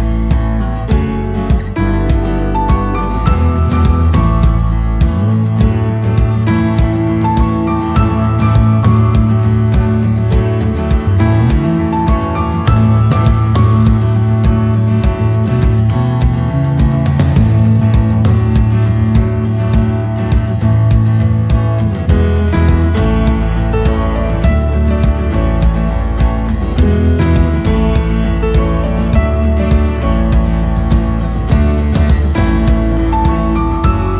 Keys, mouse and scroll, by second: 2.6 click, 2.8 middle click, 3.4 click, 3.7 middle click, 4.2 click, 4.7 middle click, 4.7-5.1 scroll up 2, 5.9 click, 6.2-6.8 scroll down 2, 6.3 middle click, 6.8 middle click, 7.3 scroll down 3, 9.0 click, 14.3 middle click, 14.9-15.5 scroll up 3, 16.1 click, 17.5 click, 18.5 click, 19.5 click, 20.0 click, 20.6 click, 21.5 middle click, 22.0 scroll up 2, 22.3 middle click, 23.1-23.5 scroll down 2, 23.7 middle click, 24.1-24.4 scroll down 3, 24.4 middle click, 30.1 click, 30.6 click, 30.7 click, 31.8 s, 33.1 click, 33.3 click, 33.7 click, 33.7 s.